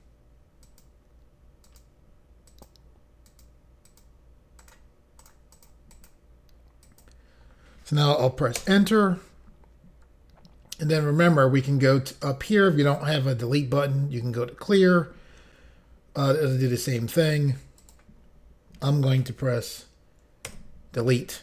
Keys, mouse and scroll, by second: 0.6 click, 0.8 click, 1.7 click, 2.5 click, 3.3 click, 3.9 click, 4.0 click, 4.6 click, 5.2 click, 5.3 click, 5.5 click, 5.9 click, 6.1 double click, 6.8 double click, 8.6 Return, 12.8 click, 17.8 click, 20.5 Delete.